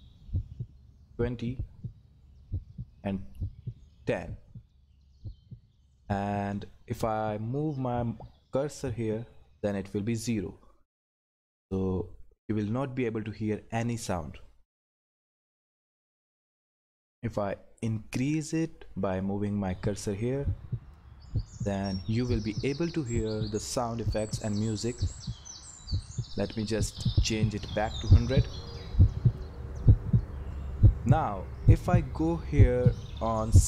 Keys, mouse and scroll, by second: 27.4 click.